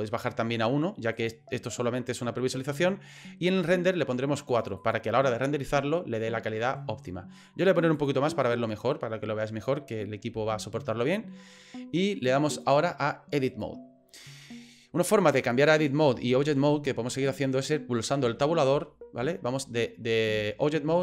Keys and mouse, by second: 1.2 click, 4.5 click, 7.9 click, 12.6-13.6 drag, 18.2 Tab, 18.7 Tab, 19.2 Tab, 19.6 Tab, 20.3 Tab, 20.9 Tab.